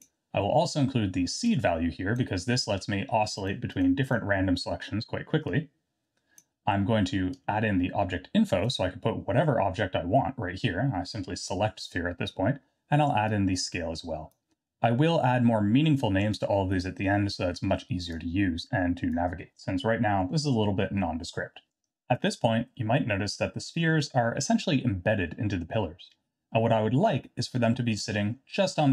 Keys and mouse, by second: 1.5 click, 3.7 click, 4.0 click, 5.7 click, 7.3-8.6 drag, 13.3-14.3 drag, 18.1-19.1 drag.